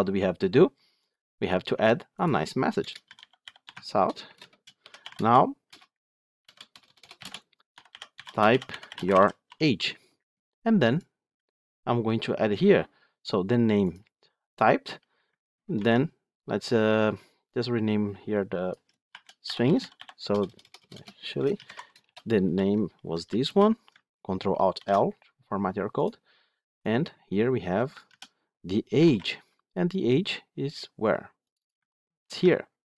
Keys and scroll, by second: 3.6 Tab, 15.6 ctrl+d, 24.7 ctrl+alt+l, 32.1 ctrl+c.